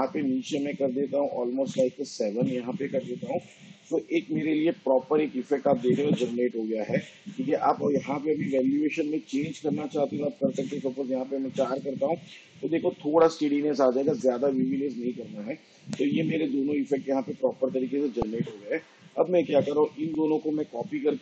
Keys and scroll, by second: 1.7 7, 10.9 4.